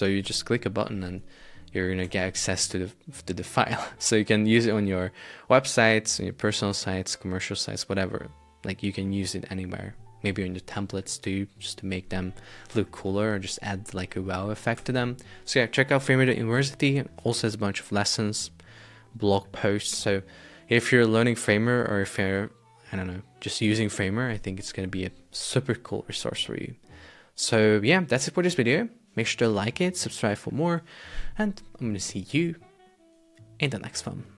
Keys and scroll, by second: 2.2 super+Tab, 14.8 super+Tab.